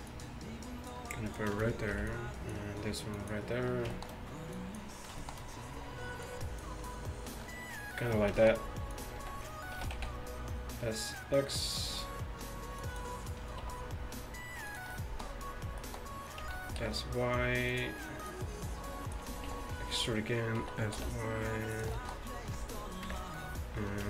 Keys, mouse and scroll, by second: 0.1 click, 2.0 b, 4.1-7.7 middle drag, 7.0 click, 7.6 click, 9.0 click, 9.2 z, 9.8 s, 12.8-14.7 drag, 13.7 e, 16.5 s, 18.3-20.6 drag, 19.5 e, 20.6 s, 22.1 click, 23.1 KP_1.